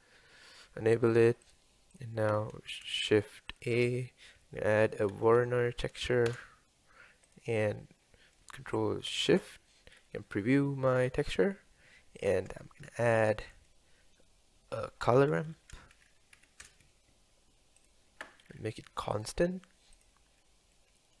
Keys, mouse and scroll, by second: 8.4 scroll up 2, 9.1 ctrl+shift+click, 10.0 scroll up 2, 18.8-20.1 scroll up 5, 20.1 click, 20.5-21.2 middle drag.